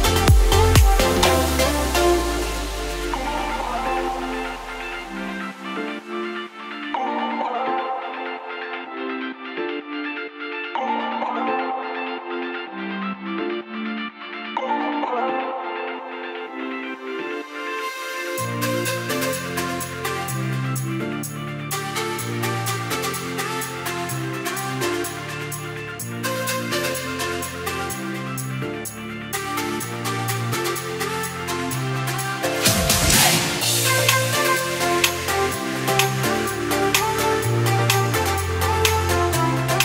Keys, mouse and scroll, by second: 0.5-4.3 scroll down 1, 8.1 scroll up 1, 8.4 click, 13.5 click, 17.5 scroll down 1, 18.8 click, 20.7 click, 24.1 KP_1, 25.2 click, 26.0 scroll up 1, 30.4 click, 31.0 click, 32.9 click, 33.3 click, 34.8 Tab, 36.0 click, 36.3 Tab, 37.1 click, 38.3-38.7 scroll down 1, 39.1 click, 39.6 scroll down 1.